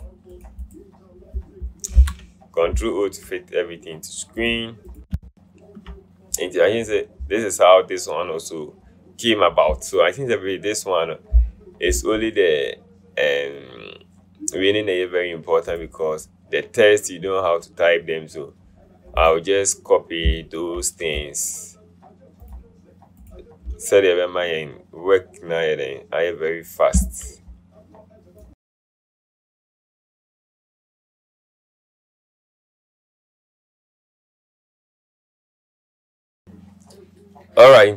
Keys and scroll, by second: 2.2 ctrl+0, 33.6 ctrl+0.